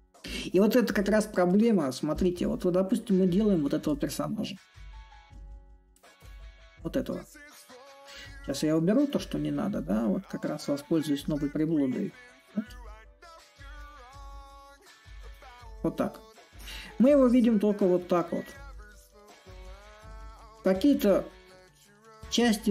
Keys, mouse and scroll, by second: 0.0-10.9 drag, 13.6-22.7 drag.